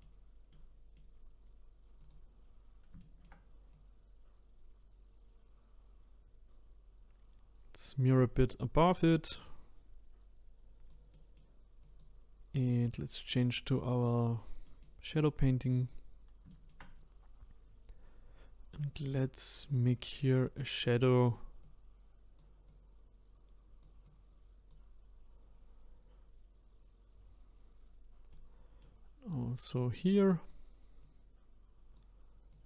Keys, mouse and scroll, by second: 0.1-0.5 scroll up 3, 0.5-2.0 middle drag, 2.0 click, 2.4-3.0 scroll up 2, 3.0 shift+middle click, 3.7-6.7 drag, 8.8 middle click, 9.4-11.1 drag, 11.1 middle click, 11.8-14.6 drag, 14.6-15.8 middle drag, 15.8 click, 16.5 shift+middle click, 17.1-18.2 scroll up 1, 18.9-27.2 drag, 28.3-29.7 middle drag, 29.7-32.6 drag.